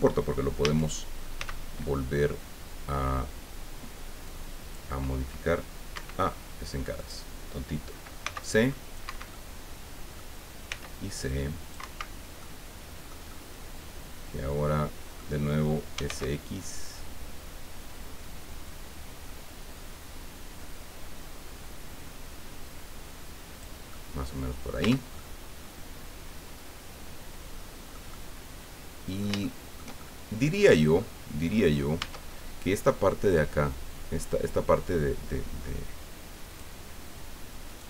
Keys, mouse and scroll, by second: 0.6 a, 1.4 c, 4.3 click, 6.0 Escape, 7.0 click, 8.2 c, 8.4 click, 9.1 Escape, 9.3 middle click, 10.7 c, 11.2 click, 11.8 Escape, 12.1 scroll down 1, 12.4-15.3 middle drag, 15.9 s, 16.0 x, 20.4-20.9 scroll down 1, 23.5 click, 23.9-24.9 drag, 24.8 Tab, 25.1-29.9 drag, 30.0 shift+click, 30.8 middle click, 30.9-31.2 scroll up 2, 31.5 scroll up 2, 32.0 Tab, 36.5 click, 37.7 right click.